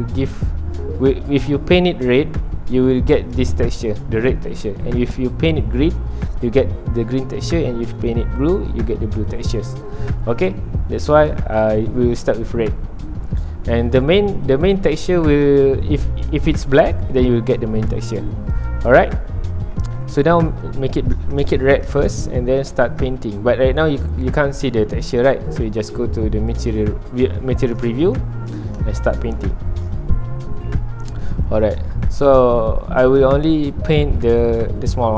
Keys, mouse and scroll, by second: 11.1-14.8 drag, 18.5-19.6 drag, 19.6-22.2 middle drag, 22.2 scroll up 2, 22.7-23.7 shift+middle drag, 23.7 scroll down 1, 23.9-26.5 middle drag, 26.5-27.5 drag, 27.5-29.9 middle drag, 29.9 scroll up 1, 30.7 scroll down 1, 30.8-32.1 middle drag, 32.1-33.2 drag, 33.2-35.1 middle drag.